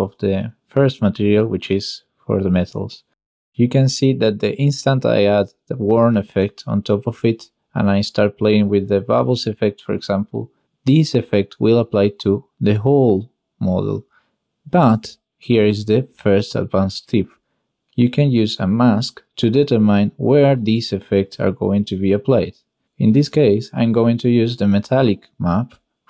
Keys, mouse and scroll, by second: 1.0 click, 2.0 click, 2.8-6.1 drag, 6.1 middle click, 7.5-9.5 shift+middle drag, 10.2 middle click, 12.7 middle click, 13.4 middle click, 17.4 click, 18.5 n, 19.1 ctrl+z, 19.1 ctrl+x, 19.4 shift+a, 20.5 Down, 21.7-22.3 drag, 23.9 click.